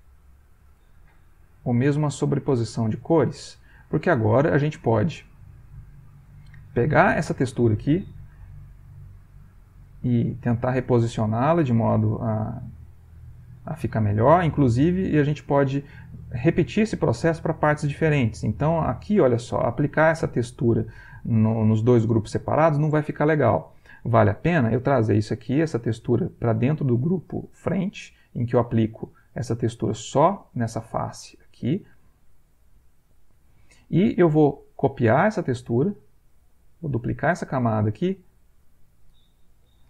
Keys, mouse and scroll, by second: 1.5 click, 2.5 click, 3.6 click, 4.1 click, 5.2-6.4 middle drag, 6.9 click, 8.7-16.0 drag, 18.8 click, 19.3 ctrl+click, 24.6-25.9 drag, 31.8-33.1 drag, 35.5 click, 37.0 click, 38.5 click.